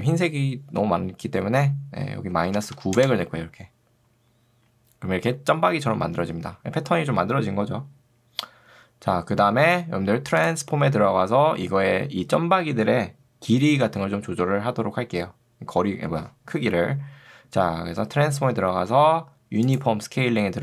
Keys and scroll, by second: 2.4 9, 3.0 Return.